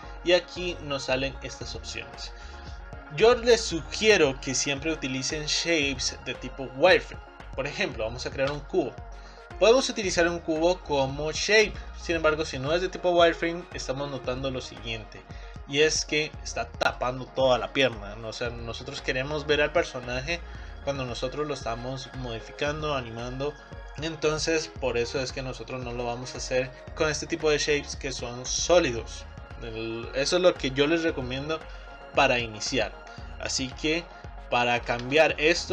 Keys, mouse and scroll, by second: 9.2-9.6 scroll down 3, 9.6-11.9 middle drag, 14.8 middle click, 15.7-16.1 scroll up 1, 16.1-19.1 middle drag, 35.1 Tab.